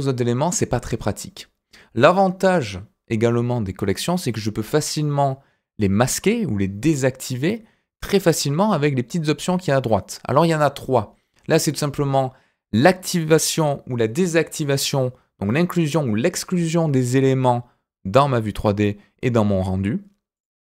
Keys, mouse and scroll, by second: 4.2 click, 20.3 click.